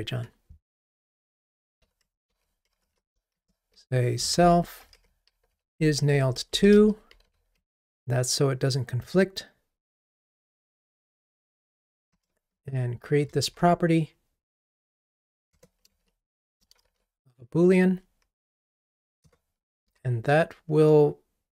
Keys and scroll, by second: 1.8 super+c, 5.5 super+v, 12.2 alt+Return, 15.6 Return, 20.0 ctrl+r.